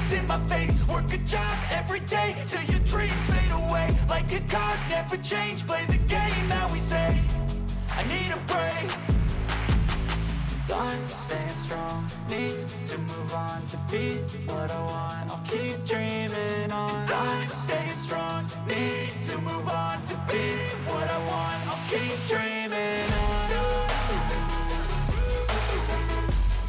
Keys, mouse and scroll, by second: 1.0 space, 6.4 space, 8.7 shift+Left, 9.7 a, 9.9 Delete, 10.9 ctrl+alt+KP_0, 12.8 i, 13.9 click, 14.6 shift+click, 15.2-15.7 shift+middle drag, 15.7-16.4 shift+middle drag, 17.8 ctrl+i, 18.6 click, 19.4 ctrl+alt+KP_0, 20.4 i, 21.4 click, 21.8 space, 23.8 space, 24.0-25.5 drag, 25.8 click, 26.3 shift+click, 26.5 middle click.